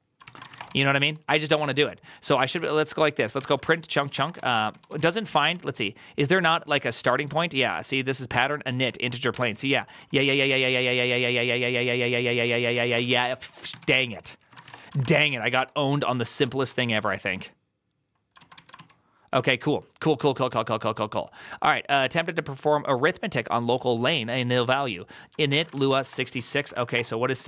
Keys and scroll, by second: 0.0-5.4 typing, 0.1 ctrl+c, 3.3 Tab, 3.4 ctrl+c, 3.6 ctrl+c, 9.2 ctrl+c, 9.3 ctrl+c, 9.4 ctrl+c, 9.7 ctrl+c, 9.8-15.5 typing, 16.1 Up, 16.2 Up, 16.5 Return, 18.2 ctrl+a, 18.4 [, 18.6 ctrl+u, 19.2 ctrl+d, 25.2-27.4 typing, 26.8 Return.